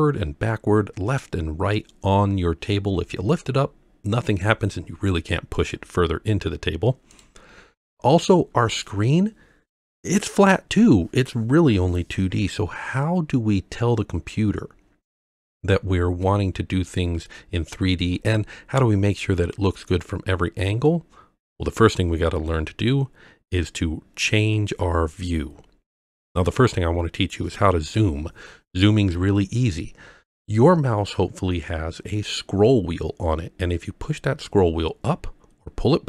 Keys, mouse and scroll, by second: 5.6 click, 7.1 click, 34.5-35.9 scroll up 6, 35.9-36.0 scroll down 6.